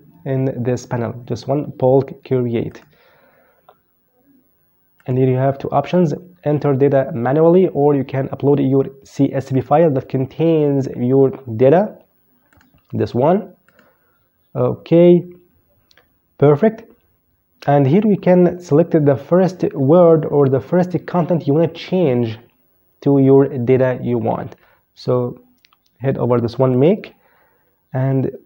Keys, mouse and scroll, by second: 1.9 click, 4.1 click, 8.7 click, 11.6 click, 12.8 click, 25.9 click, 27.8 right click.